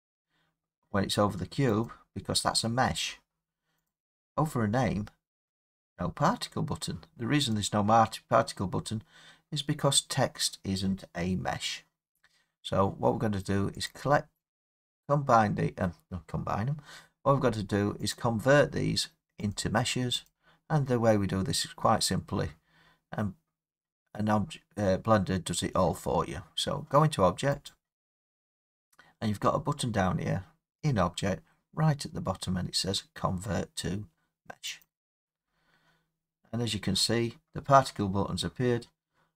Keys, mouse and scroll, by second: 1.9 click, 3.9 click, 7.5 click, 13.9 click, 14.8 scroll, 15.5-16.7 scroll, 16.7-17.5 scroll, 18.1 click, 19.5 click, 20.3 click, 27.7 click, 34.8-39.3 drag.